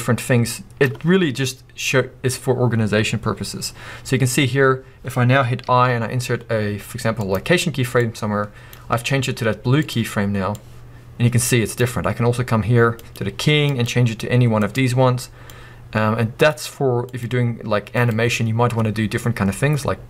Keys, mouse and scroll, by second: 8.0 click, 10.7-14.2 drag, 14.3-18.8 drag, 19.7 click.